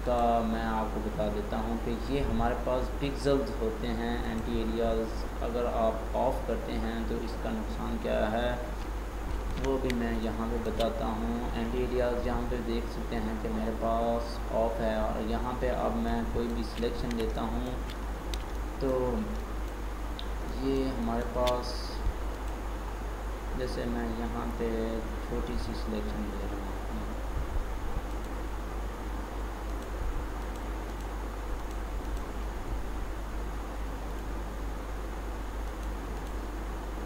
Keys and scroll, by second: 9.5 ctrl+d.